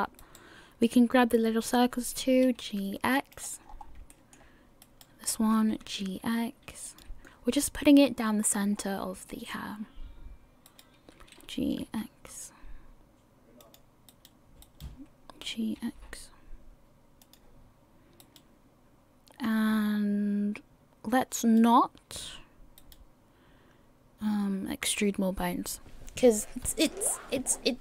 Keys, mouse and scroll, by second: 0.4 right click, 2.1 g, 3.6 scroll down 3, 4.1 shift+middle click, 5.0 right click, 5.7 g, 8.8-9.2 scroll down 2, 9.3 shift+middle click, 10.9 right click, 11.5 g, 14.3 right click, 14.8 right click, 15.5 g, 18.4 right click, 19.7-20.5 scroll down 1, 21.3 scroll down 1, 21.6 right click, 22.9 right click.